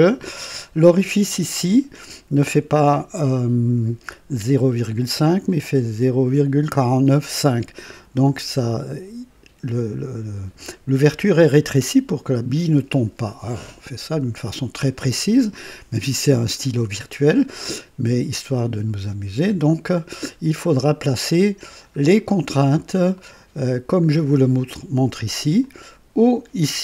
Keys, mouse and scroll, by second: 0.4 click, 0.5-2.0 right drag, 20.5 scroll down 2, 21.1 right click, 22.7 scroll down 1, 23.1 right click, 25.5 click.